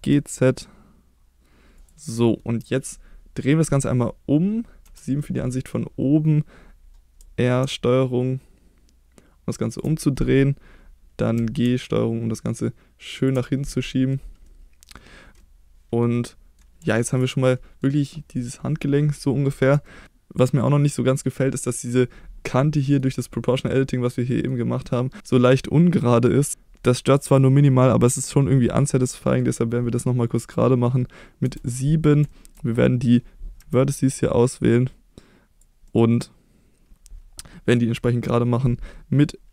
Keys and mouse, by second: 1.7 click, 2.1 middle click, 4.8 KP_7, 7.2 r, 9.7 ctrl+click, 11.3 g, 13.2 click, 13.4 middle click, 14.4 middle click, 15.5 middle click, 16.3 middle click, 16.9 shift+middle click, 17.3 middle click, 19.8 shift+middle click, 20.9 middle click, 22.5 middle click, 24.3 middle click, 29.1 middle click, 31.4 KP_7, 32.3 shift+middle click, 33.6 1, 34.1-35.6 drag, 35.8-37.7 middle drag.